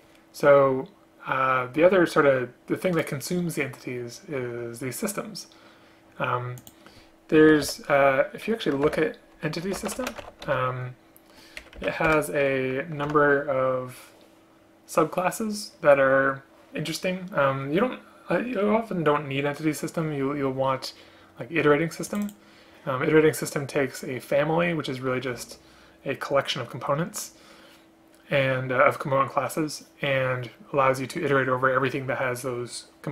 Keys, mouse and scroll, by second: 7.6 Return, 7.8 Return, 9.0 ctrl+n, 12.2 Return, 13.2 ctrl+h.